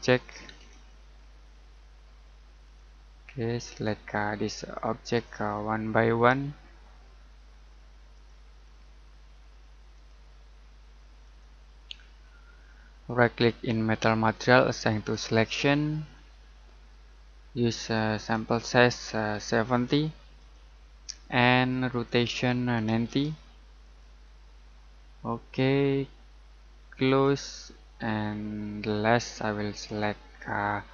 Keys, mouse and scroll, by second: 0.6 Escape, 1.2-2.6 scroll up 1, 2.6 click, 5.4-5.8 scroll down 1, 5.8 middle click, 6.3-7.1 scroll down 1, 8.1 click, 8.6-9.9 scroll up 1, 9.9 click, 12.1 scroll down 1, 12.5 middle click, 15.1 click, 18.3 click, 19.3-19.7 typing, 20.3 click, 22.6-23.5 typing, 23.8 click, 27.0 click, 28.2 middle click, 29.3-30.7 scroll up 1.